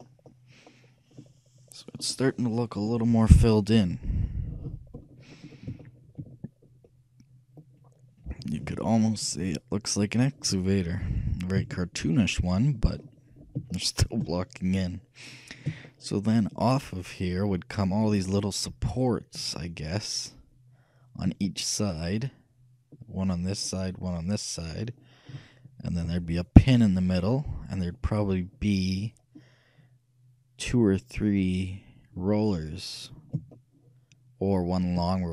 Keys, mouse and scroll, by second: 4.0 KP_3, 5.5-7.5 shift+middle drag, 8.9 middle click, 11.1 KP_1, 11.6 KP_3, 13.9-17.9 shift+middle drag, 21.5-23.5 middle drag, 26.1 KP_3, 28.5-35.3 middle drag.